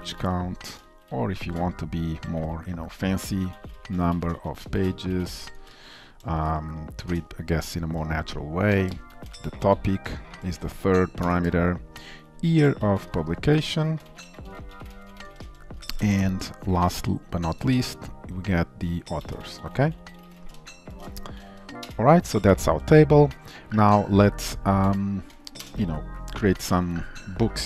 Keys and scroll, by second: 1.0 ctrl+shift+Left, 22.4 ctrl+s.